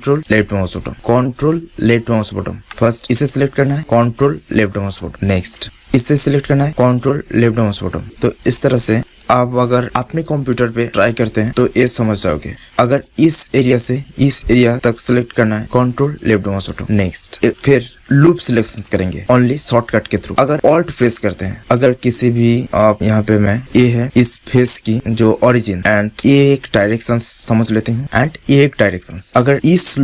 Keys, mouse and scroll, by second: 0.1 click, 2.7-5.0 drag, 5.7-8.0 drag, 8.0 right click, 8.0 middle click, 9.0 click, 9.8-11.0 middle drag, 11.2-12.6 drag, 12.6 middle click, 12.9-15.1 drag, 16.0 click, 17.0-20.0 middle drag, 20.2-21.7 middle drag.